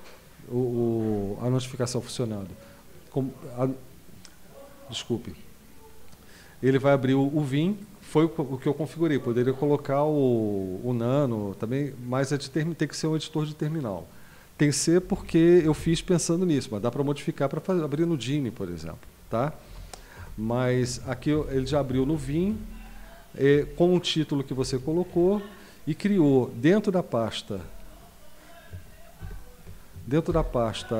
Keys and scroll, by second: 15.0 Down, 15.2 Down, 15.6 Up, 15.8 Up, 19.6 Down, 20.2 Down, 20.8 Up, 21.0 Up, 21.3 Down, 21.5 Down, 21.7 Down, 21.9 Down, 22.1 Up, 22.3 Up, 22.5 Up, 23.5 Right, 24.2 Right, 24.4 Right, 24.6 Down, 25.1 Down, 29.3 super+;, 30.3 super+Return.